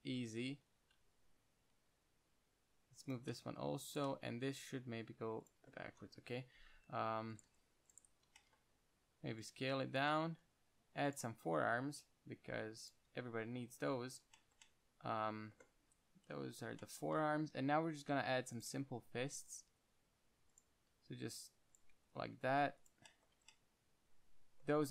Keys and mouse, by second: 0.9 KP_1, 1.1 z, 1.5 g, 3.6 middle click, 4.2 middle click, 5.0 g, 5.3 click, 6.1-7.6 drag, 6.5-9.1 typing, 9.8 click, 10.6 e, 11.9 g, 13.4 s, 14.7 middle click, 16.5 KP_1, 17.9 e, 19.0 s, 20.0 g, 21.2 e, 22.3 s, 23.7 Tab.